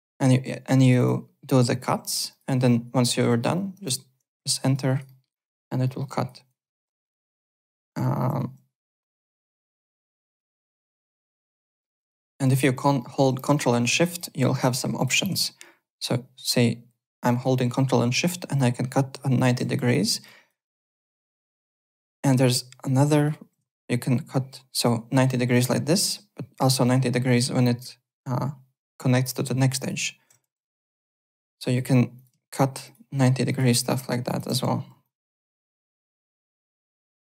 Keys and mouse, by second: 0.9 click, 1.7 click, 2.3 click, 3.8 Return, 4.5 alt+click, 4.8 alt+right click, 5.0 alt+middle click, 5.3 alt+click, 5.8 alt+middle click, 6.0 alt+right click, 6.7 alt+Tab, 7.3 alt+Tab, 8.1 alt+Tab, 11.6 alt+Tab, 12.2 alt+click, 12.6 alt+click, 13.0 alt+middle click, 13.5 alt+middle click, 13.8 alt+right click, 14.1 alt+click, 14.9 click, 19.7 w, 20.2 alt+click, 21.1 y, 21.6 alt+middle click, 21.9 alt+click, 23.1 click, 29.8 ctrl+shift+click, 30.4 w, 30.7 alt+middle click, 31.5 y, 32.1 click, 32.8 ctrl+shift+click, 33.4 ctrl+shift+click, 34.2 ctrl+shift+click, 34.7 w, 35.0 alt+click, 35.4 alt+right click, 35.9-37.4 typing.